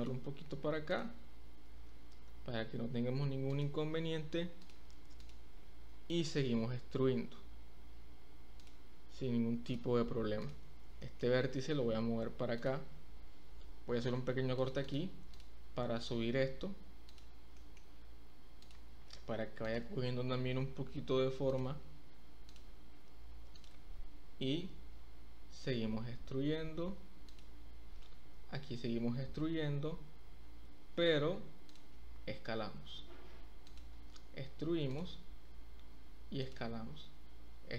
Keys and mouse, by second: 0.0 click, 0.8 click, 1.7 g, 3.5 click, 4.6 click, 5.9 e, 8.6 click, 10.9 shift+click, 11.7 g, 14.1 ctrl+r, 14.8 click, 16.2 g, 17.0 click, 17.5 shift+middle click, 20.7 g, 21.5 click, 22.5 click, 23.5 click, 24.5 e, 27.2 click, 28.3 e, 31.7 click, 32.1 s, 33.6 click, 33.9 e, 34.9 click, 35.4 s, 36.4 click, 36.7 e.